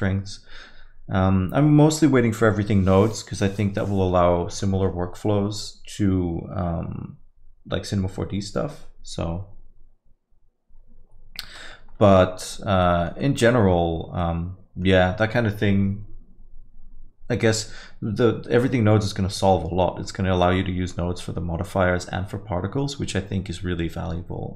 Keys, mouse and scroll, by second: 12.2 middle click, 12.8 alt+middle click, 13.2 middle click, 13.5-14.2 scroll down 1, 14.2 middle click.